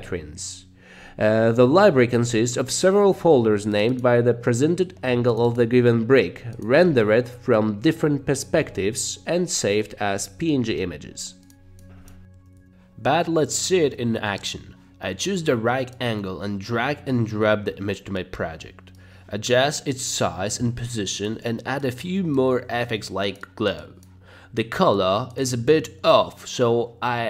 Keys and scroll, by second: 6.9 space, 7.7 Right, 8.6 Left, 9.0 space, 12.1 space, 21.3 g, 22.7 c.